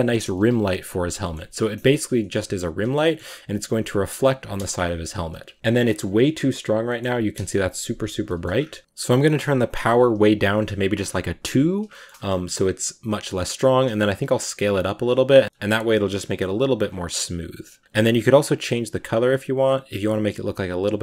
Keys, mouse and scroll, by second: 0.2 KP_Decimal, 0.8-1.6 scroll down 7, 1.1 shift+middle drag, 1.6 middle drag, 1.9 scroll up 1, 2.0 g, 2.6 middle drag, 2.8 shift+scroll up 1, 2.9-3.7 shift+middle drag, 3.7 r, 4.4 KP_0, 5.3 g, 5.5-8.8 scroll up 1, 10.9 click, 11.6-12.2 scroll up 3, 11.8 shift+middle click, 12.4-12.8 scroll down 1, 13.3 scroll down 3, 13.5 s, 14.8 g, 15.2 s, 15.4 scroll down 1, 15.8-16.5 shift+middle drag, 16.5 g, 17.7 click, 18.8 click.